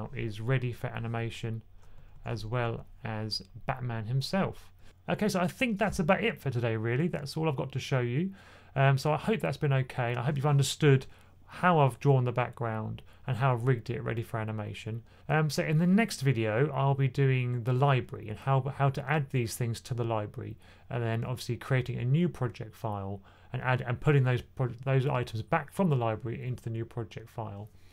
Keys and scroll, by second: 1.8 2, 2.0 2, 2.2 2.